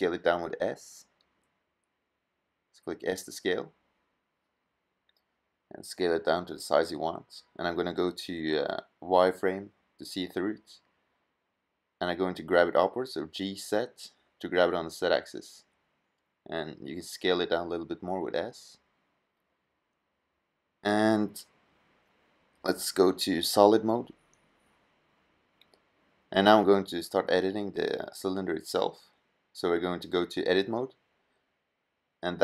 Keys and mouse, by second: 2.0 s, 6.2 middle drag, 6.5 middle drag, 12.6 g, 15.1 s, 16.6-17.9 drag, 19.8 middle click, 20.1 middle drag, 20.5 s, 21.8-22.6 drag, 23.4 click, 25.4 middle drag.